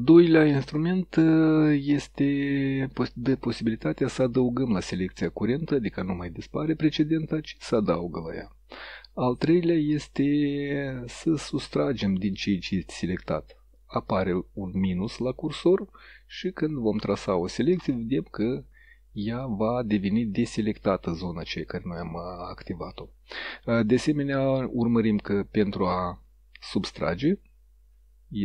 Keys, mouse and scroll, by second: 2.8 click, 3.9-4.9 drag, 5.4 click, 7.1 click, 11.1 click, 15.9-18.1 drag, 19.2-20.0 drag.